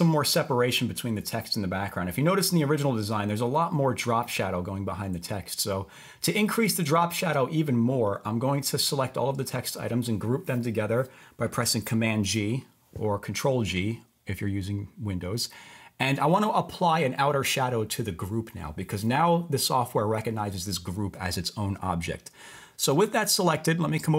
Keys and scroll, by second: 12.3 super+g.